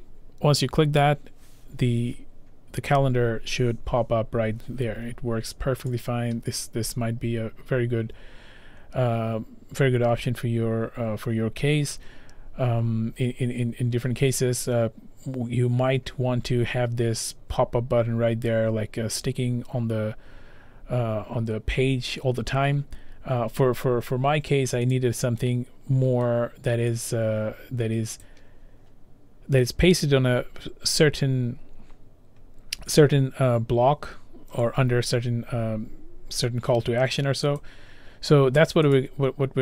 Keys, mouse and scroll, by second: 1.9-3.6 scroll, 5.9 click, 6.9-7.9 scroll, 12.4-12.9 scroll, 14.0-14.6 scroll, 17.9 scroll down 6, 20.7 middle click, 20.7-21.8 scroll down 7, 21.1 middle click, 21.6 middle click, 21.8 scroll, 22.2 middle click, 22.2-22.5 scroll down 5, 22.5 scroll, 23.4-24.2 scroll, 25.0 click, 25.7 scroll, 26.3-27.1 scroll, 27.1 click, 28.5 click, 32.2 click, 37.7 click, 39.0 click.